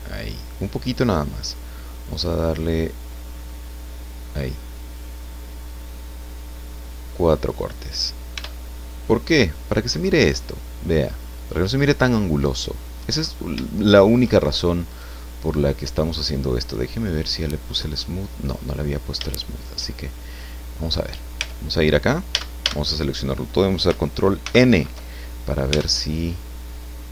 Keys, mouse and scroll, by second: 4.7 scroll up 1, 5.5 scroll up 1, 6.6 scroll up 2, 7.5 click, 8.3 Tab, 9.0 scroll down 2, 9.5-13.6 drag, 13.6 shift+click, 14.9 right click, 17.7 click, 19.3 shift+middle click, 20.0-20.4 shift+scroll up 3, 20.4 scroll down 2, 20.7 scroll up 2, 20.8 scroll down 2, 21.0 scroll up 2, 21.4 Tab, 22.3 a, 24.4 ctrl+n, 25.7 Tab.